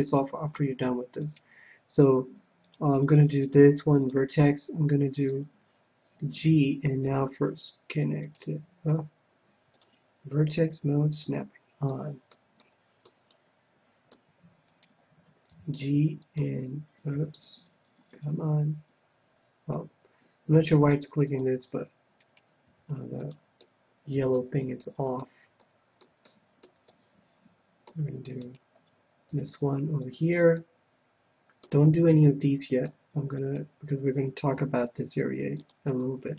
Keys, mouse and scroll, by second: 0.0 click, 1.2-3.0 right drag, 2.4-5.1 drag, 5.3-7.1 middle drag, 6.5 g, 8.3-10.3 right drag, 9.7-11.5 drag, 11.8-14.9 middle drag, 14.6-16.4 right drag, 15.4 g, 16.4-18.1 drag, 17.1 g, 21.4-23.1 drag, 22.2-24.0 right drag, 22.7 g, 23.4-24.9 drag, 23.6-28.5 middle drag, 28.4-30.1 right drag, 29.3 g, 30.1-31.7 drag, 30.5-32.7 middle drag, 33.2 middle click, 33.2-35.2 right drag, 34.5 g, 35.7-36.3 drag, 36.2-36.3 right drag.